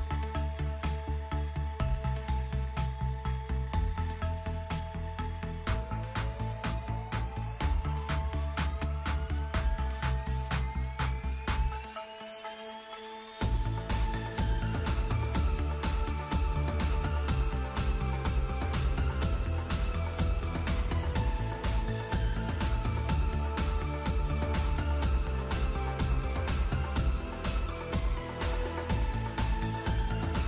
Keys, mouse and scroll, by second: 2.0 click, 3.0 space, 6.1 space, 8.3 click, 8.7 n, 9.6 z, 10.4 right click, 11.3 h, 12.8 right click, 13.6 F2, 15.9 click, 16.9 click, 18.5 click, 20.7 Tab, 21.7 a, 23.3 p, 25.9 Tab, 27.6 m.